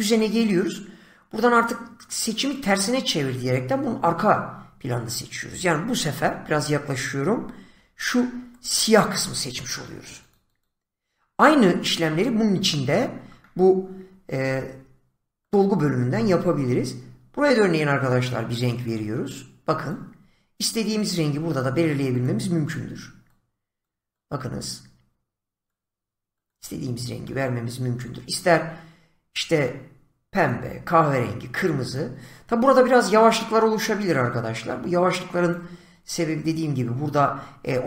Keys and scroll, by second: 7.6 <.